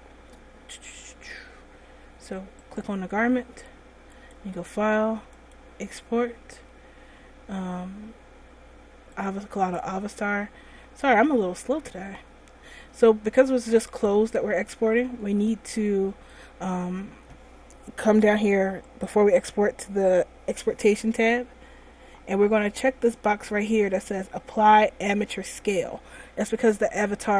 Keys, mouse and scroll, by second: 2.9 right click, 4.3 click.